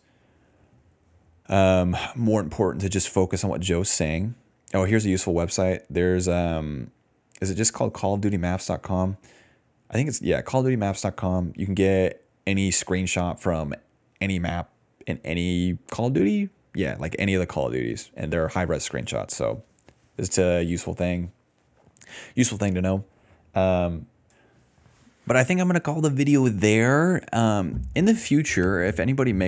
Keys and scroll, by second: 0.0-1.9 typing, 19.5 scroll up 1, 20.4 scroll up 1, 22.5-24.0 scroll up 1, 24.7 scroll up 1.